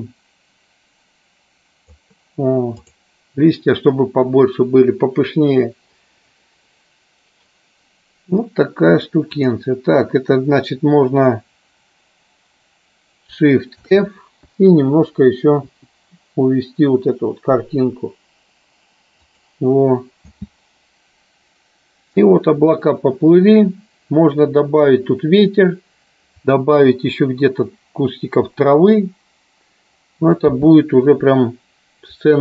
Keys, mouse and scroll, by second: 2.7 click, 9.3 click, 13.9 shift+f, 15.7 Down, 19.5 click, 20.3 space, 30.7 space.